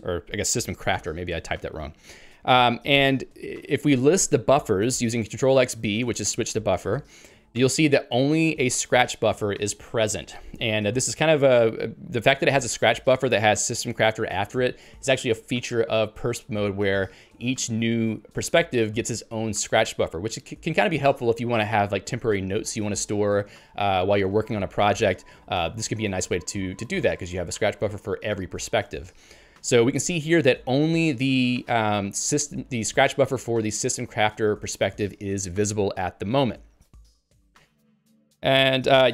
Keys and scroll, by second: 36.4 ctrl+g.